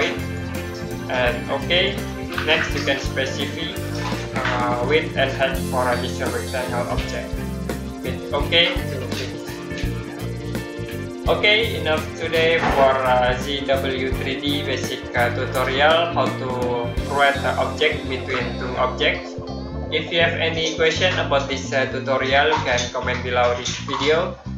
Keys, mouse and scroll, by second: 6.8 click.